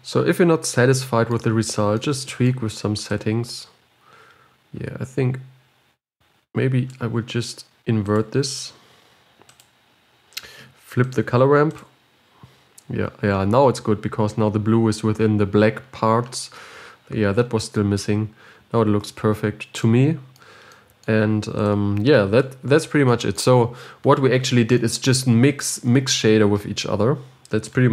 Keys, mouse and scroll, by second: 3.6-6.4 drag, 12.3-18.4 drag, 18.4-18.9 scroll down 3, 18.5 middle click, 18.9-19.9 scroll up 5, 19.9 scroll up 3, 20.2-22.0 middle drag, 22.0-27.9 drag.